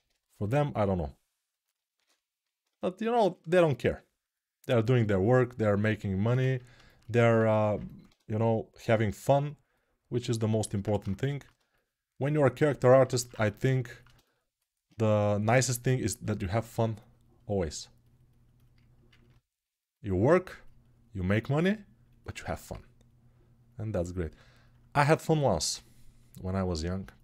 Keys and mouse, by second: 0.2 shift+r, 2.5 ctrl+r, 7.1 1, 10.2-27.2 alt+drag.